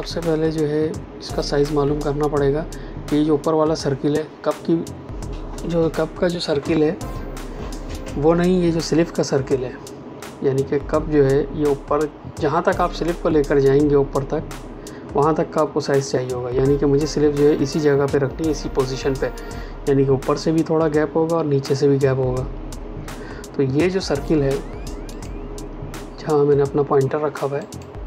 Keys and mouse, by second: 25.1 click.